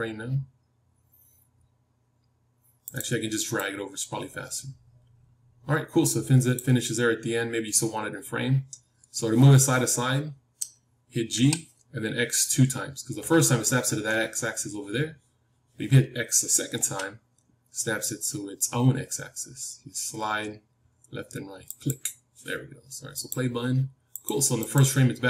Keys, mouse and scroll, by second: 11.3 g, 23.2-25.2 drag.